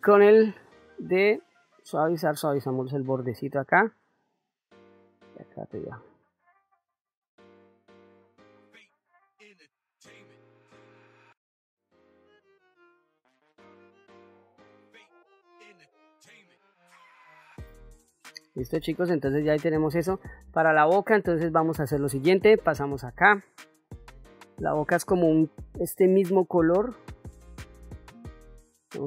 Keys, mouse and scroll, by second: 0.2 click, 1.6-3.8 drag, 4.3-5.5 drag, 5.8 click, 6.9 ctrl+middle click, 7.5 ctrl+middle click, 7.7 middle click, 8.3 f, 9.0 click, 9.9 middle click, 10.1 ctrl+middle click, 10.4 middle click, 10.8 f, 11.1 click, 11.9 ctrl+middle click, 12.1 ctrl+middle click, 12.2 middle click, 13.0 click, 13.7 click, 13.9 ctrl+middle click, 14.5 f, 14.9 click, 15.5 click, 16.1 click, 17.0 ctrl+middle click, 17.4 ctrl+middle click, 18.0 middle click, 19.9 middle click, 22.2 click, 27.7 click.